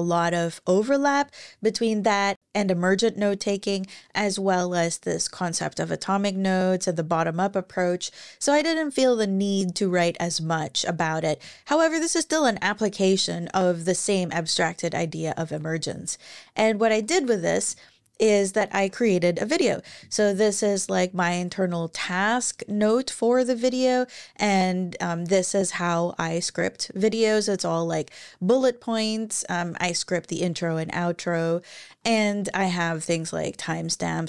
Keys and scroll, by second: 16.6 super+w.